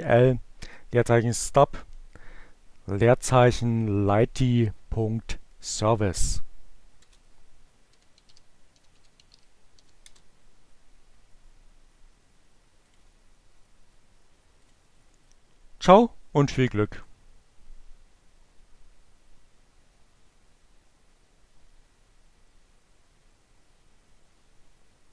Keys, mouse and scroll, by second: 5.4 Return, 6.8-8.7 typing, 11.9 click, 13.5 click.